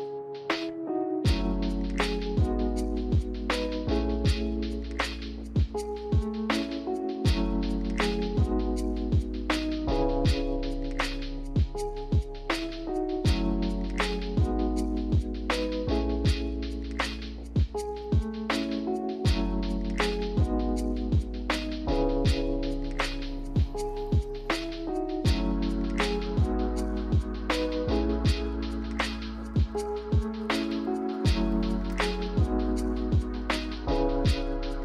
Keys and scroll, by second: 5.2 a, 12.2 a, 28.7 a, 33.0 a.